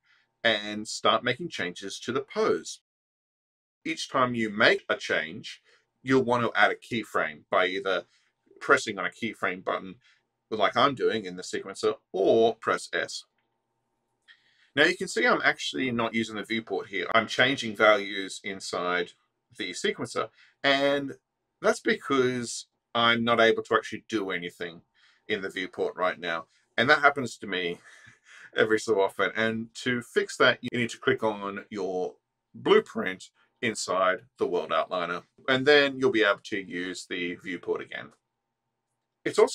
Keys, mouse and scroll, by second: 3.1-8.3 drag, 9.5 click, 11.2-13.9 drag, 14.7-17.2 drag, 17.7-21.1 drag, 21.7-23.9 drag, 25.3 click, 27.0 click, 31.4 click, 37.3-39.5 drag.